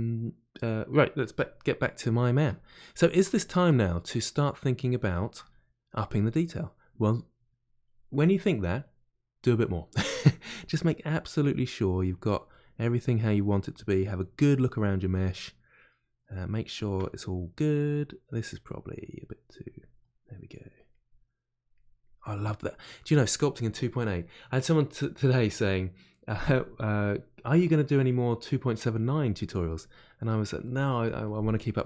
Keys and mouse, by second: 7.4-9.8 drag, 9.8 middle click, 10.7-12.5 drag, 12.5-17.8 middle drag, 17.8 click, 18.6 middle click, 19.2 click, 20.0 middle click, 20.5 click, 21.2 middle click, 21.7 click, 22.4-31.8 middle drag.